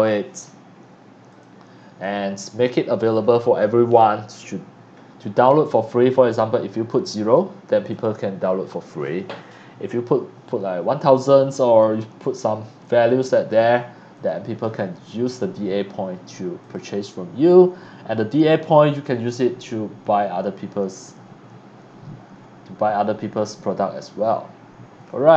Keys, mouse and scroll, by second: 6.8 click, 7.7 click, 12.8 click, 14.1 click, 14.6-15.8 drag, 16.6 click, 17.8 scroll down 1, 18.5-18.9 scroll down 1, 19.5 scroll down 1, 22.3-22.6 scroll down 1, 24.3 middle click, 24.3-25.3 scroll down 1.